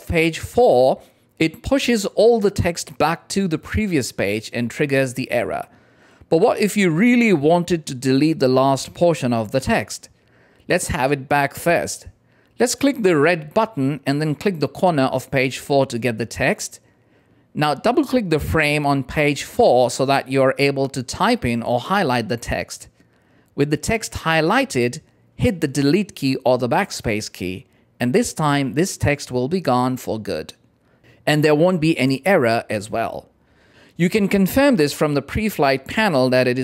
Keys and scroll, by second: 26.9 BackSpace.